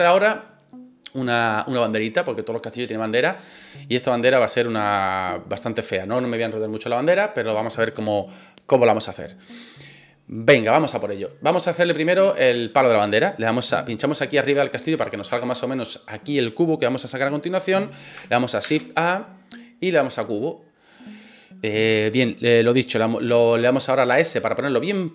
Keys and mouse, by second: 12.0 click, 14.3-15.1 middle drag, 18.6 shift+a, 24.1 s.